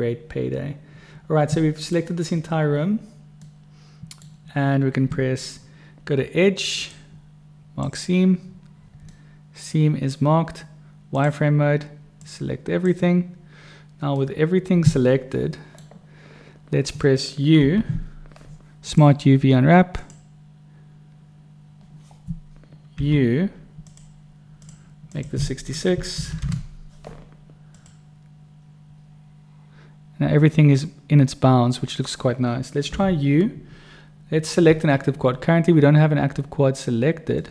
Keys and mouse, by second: 3.5 middle click, 3.9 click, 3.9 right click, 6.9-8.1 drag, 9.1 middle click, 9.7 click, 9.7 right click, 9.8 middle click, 11.1 click, 12.2 click, 12.9 right click, 14.2-15.8 middle drag, 17.6 u, 23.0 u, 26.3 6, 33.0 u, 37.4 click.